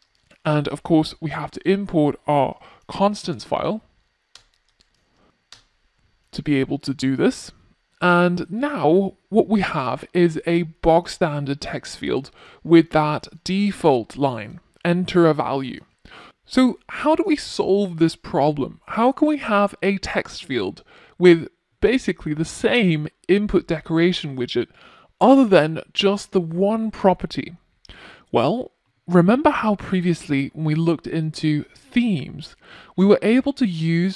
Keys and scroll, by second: 3.7 Return.